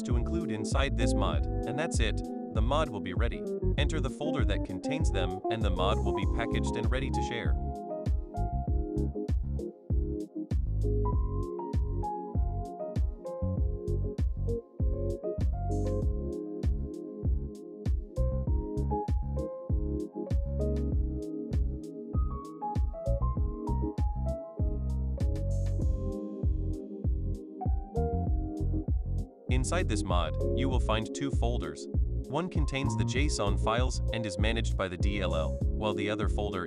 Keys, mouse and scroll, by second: 0.0-3.3 typing, 4.6-5.6 typing, 7.5 click, 15.1 click, 17.5 click, 18.9 click, 19.3 click, 20.8 click, 23.7 click, 26.5 click, 34.0-35.6 right drag, 35.7 click.